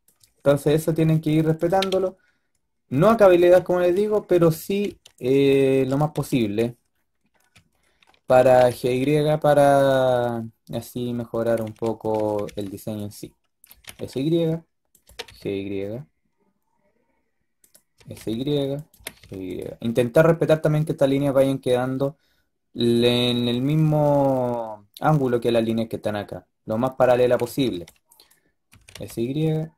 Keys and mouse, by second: 0.1 s, 1.5 g, 4.1 a, 4.4 a, 4.6 a, 4.7 b, 6.0 b, 8.3 g, 11.7 a, 12.0 a, 12.2 a, 12.3 b, 13.6 s, 14.9 g, 17.8 s, 18.8 g, 26.9 a, 27.1 a, 27.3 a, 27.5 b, 28.6 s.